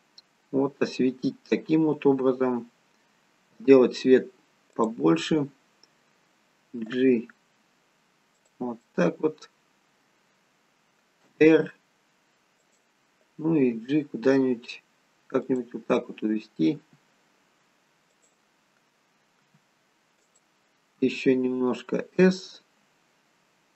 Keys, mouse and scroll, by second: 5.2 middle click, 6.9 g, 8.8 middle click, 11.2 r, 13.5 g, 19.5 r, 21.0 s.